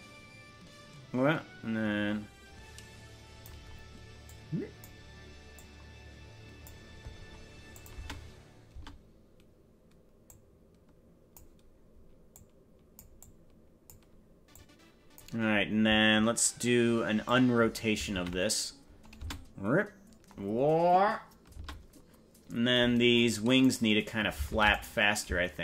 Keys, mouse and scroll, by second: 4.2 click, 5.5-6.7 drag, 7.7 click, 8.1 space, 8.9 space, 10.3-11.4 drag, 12.3 click, 13.2 click, 14.5 click, 17.3 click, 18.3 alt+r, 19.3 space, 21.7 space, 23.7 right click, 24.7 ctrl+Tab, 24.9 right click.